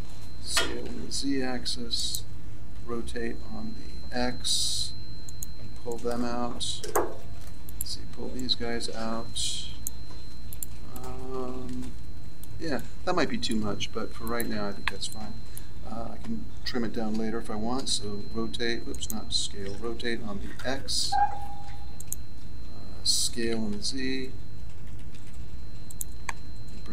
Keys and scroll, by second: 0.4 s, 2.7 r, 17.8 s, 19.7 r, 23.3 s, 23.6 z.